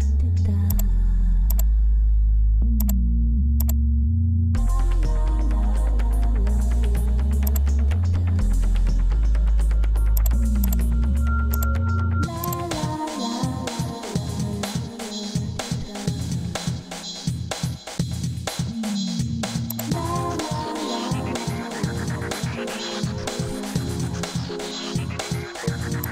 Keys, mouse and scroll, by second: 6.6 Return.